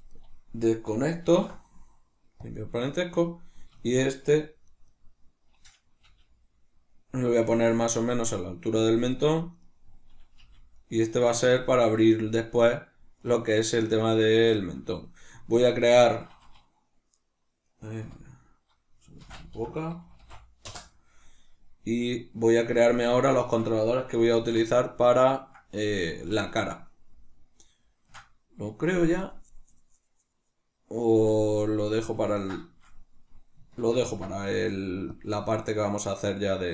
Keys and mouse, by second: 0.1 right click, 1.2 alt+p, 2.8 right click, 3.7 shift+middle click, 4.6 right click, 4.8 right click, 6.0 g, 8.8 click, 9.5 right click, 10.3 g, 10.8 right click, 13.1 right click, 14.4-21.9 shift+middle drag, 17.9 F2, 21.9-24.3 right drag, 24.3 alt+q, 24.9-35.1 ctrl+middle drag, 33.9 ctrl+alt+s, 35.1 click, 35.3-36.7 middle drag.